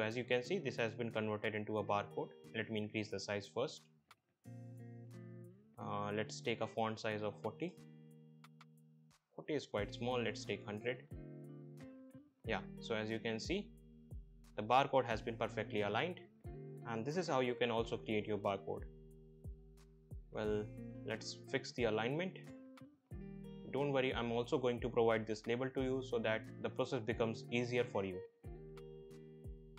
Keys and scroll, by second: 6.1 BackSpace, 7.8 4, 8.0 0, 8.3 Return, 10.8 1, 11.0 0, 11.4 Return, 21.7 Down, 25.9 shift+Up, 26.7 shift+Down, 28.2 Right.